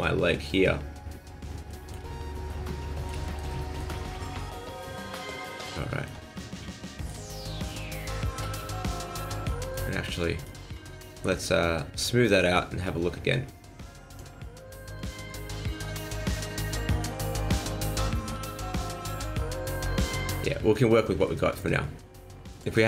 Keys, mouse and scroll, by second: 1.7 shift+middle click, 2.1 scroll down 2, 2.5 middle click, 3.2 shift+middle click, 3.5 middle click, 4.0 middle click, 4.7 shift+middle click, 5.8 shift+middle click, 6.3 scroll up 1, 6.4 middle click, 7.2 shift+middle click, 7.6 middle click, 8.0 shift+middle click, 8.4 middle click, 10.4 alt+right click, 14.1 click, 15.0 click, 16.8 click, 18.0 middle click, 18.5 scroll up 1, 18.7 middle click, 20.2 shift+middle click, 21.0 scroll up 2, 21.2 shift+middle click, 22.5 click.